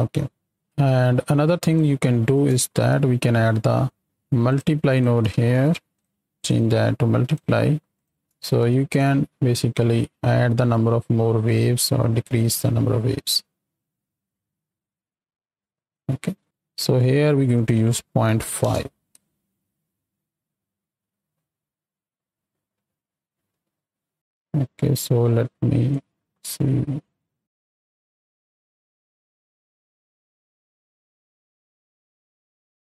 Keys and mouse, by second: 0.3 middle click, 2.3 click, 2.7 shift+d, 4.0 x, 4.5 drag, 4.9 click, 5.3 shift+d, 7.9 click, 8.9-16.4 shift+drag, 17.5-18.6 drag, 19.2 space, 19.8 click, 21.2 click, 23.3 space, 23.5 click, 25.8-28.1 drag, 28.5-31.6 drag, 32.1-32.8 drag.